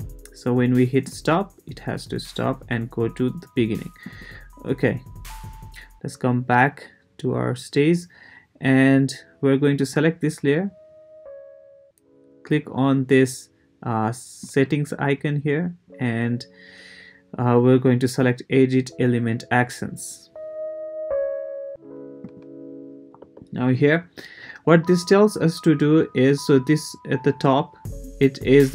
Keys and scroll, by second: 23.2 Return.